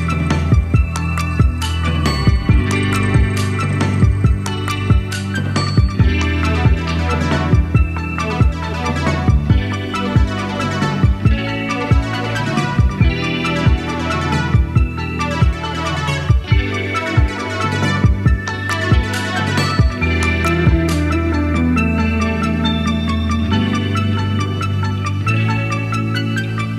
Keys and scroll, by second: 1.1 Up, 6.2 super+a, 11.5 super+a, 22.4-23.6 typing, 25.5-26.3 typing.